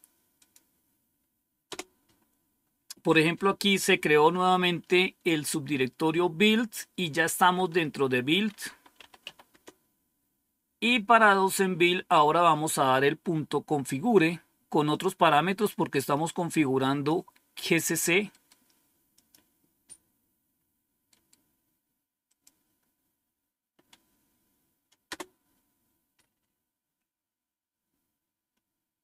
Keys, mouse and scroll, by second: 0.3 click, 1.5 Return, 8.3-9.8 typing, 12.1-12.7 scroll down 2, 14.8-17.0 drag, 18.2 right click, 19.0 click, 19.6 click, 21.0 right click, 22.1 click, 25.0 Return.